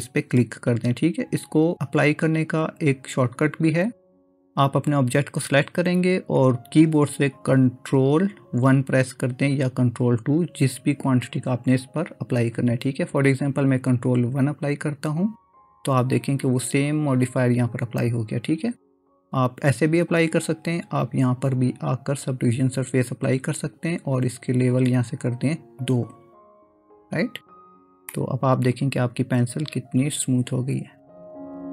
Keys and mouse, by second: 14.7 ctrl+1, 19.6-22.6 drag, 25.9 click, 28.2-31.7 middle drag.